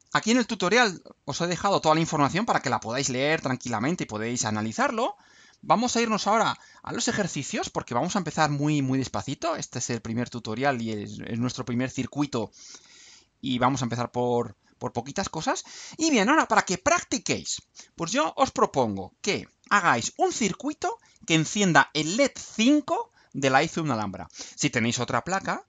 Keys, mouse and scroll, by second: 0.9-1.5 scroll down 2, 1.5-2.0 scroll down 1, 2.2-3.3 scroll down 4, 3.5-3.9 scroll down 2, 4.4-4.7 scroll up 2, 13.6 click.